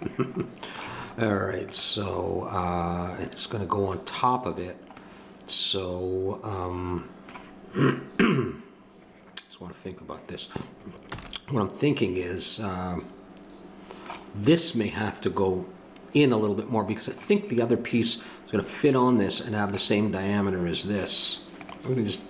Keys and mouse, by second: 1.6-6.2 drag, 1.6-3.3 right drag, 11.1 a.